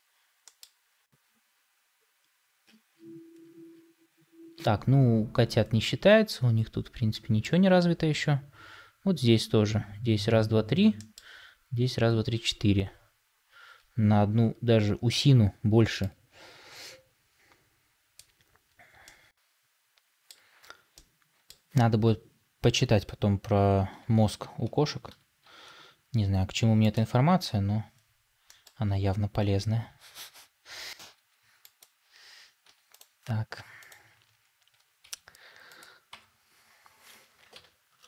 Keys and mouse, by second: 18.9-20.3 middle drag, 20.8 middle click, 25.3 shift+d, 28.4 middle click, 31.0 g, 34.9 g, 36.0 Tab, 37.4 ctrl+l.